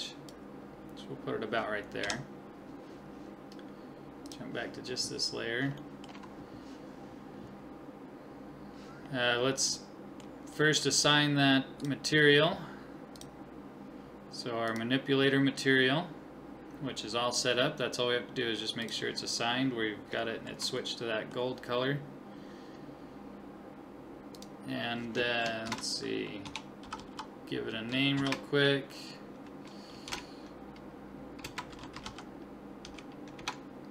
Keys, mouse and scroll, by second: 2.0 KP_1, 4.3-6.0 drag, 5.8-7.7 middle drag, 9.1-9.7 scroll up 1, 9.7-11.6 middle drag, 11.8-14.9 drag, 18.8-20.8 drag, 20.2-22.7 middle drag, 24.4-26.1 drag, 27.0 0, 27.1 0.